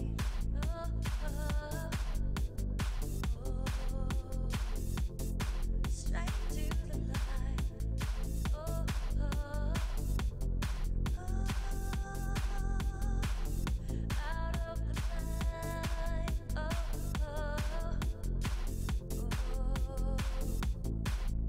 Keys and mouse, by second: 2.6-5.2 right drag, 3.3 g, 4.7 e, 6.2 e, 7.3 e, 8.4 right click, 9.7-13.1 typing, 14.2 e, 14.6 e, 15.5 e, 17.0 click, 17.3-18.5 right drag, 17.8 w, 18.7 right click, 19.3 g, 20.9 e.